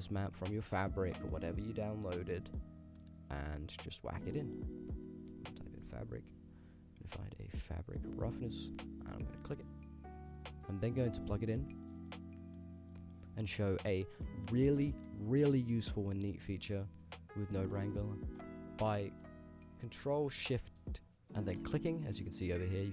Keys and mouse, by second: 10.5 middle click, 11.3 click, 14.5-17.7 middle drag, 21.6 ctrl+shift+click.